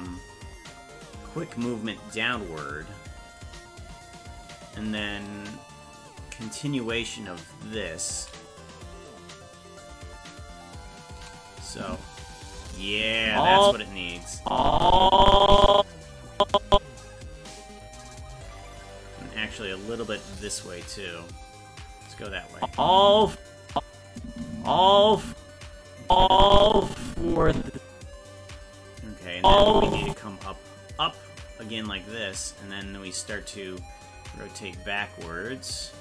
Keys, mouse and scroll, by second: 1.4-3.4 drag, 5.0-8.1 drag, 9.8-11.1 drag, 11.7 click, 11.9 space, 13.0 click, 13.2 space, 13.8 space, 14.4-16.1 drag, 16.3 click, 19.4-22.1 shift+drag, 22.6 click, 22.7 space, 23.7 click, 24.1 click, 24.3 space, 26.1-28.1 drag, 29.4 click, 31.0-32.8 drag, 34.1-36.0 drag.